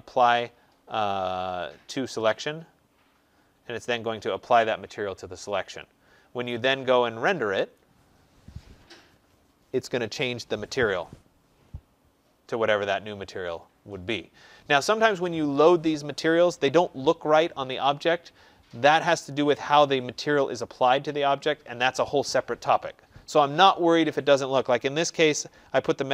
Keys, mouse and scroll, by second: 2.2 right click, 7.6 click.